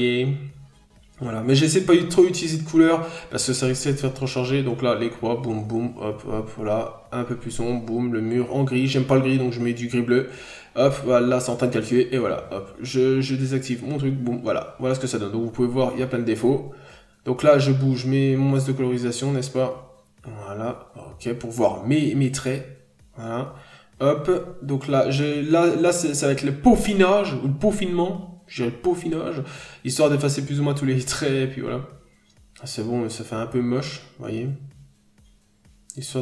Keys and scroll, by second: 3.3 b, 8.2 n, 9.1-9.6 scroll down 2, 14.3 n, 14.5 scroll up 1, 18.7-19.5 scroll down 2, 18.9 n, 23.3 scroll up 1, 23.8 p, 27.6 b.